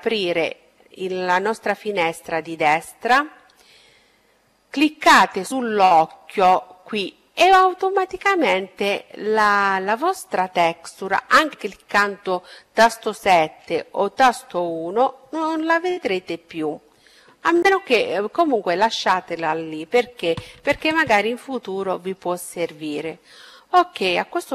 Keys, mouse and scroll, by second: 0.1-2.8 middle drag, 3.0-4.7 drag, 5.4-7.3 middle drag, 9.1 KP_7, 11.6 KP_1.